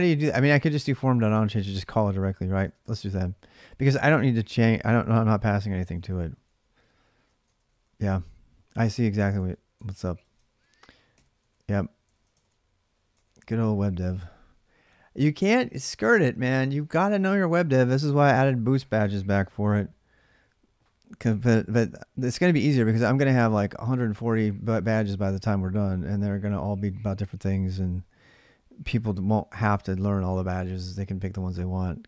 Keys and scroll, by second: 0.8-7.8 typing, 9.2 ctrl+[, 9.6 ctrl+[, 9.7-10.9 typing, 10.0 Return, 10.2 ctrl+a, 11.9 ctrl+c, 12.2 ctrl+[, 12.3 k, 12.9 Return.